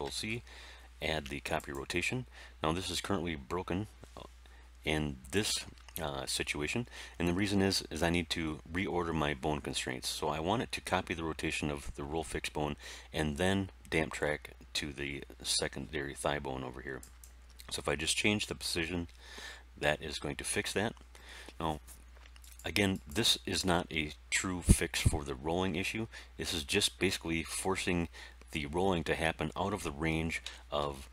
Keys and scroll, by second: 0.0 ctrl+shift+c, 30.4 r, 30.7 x.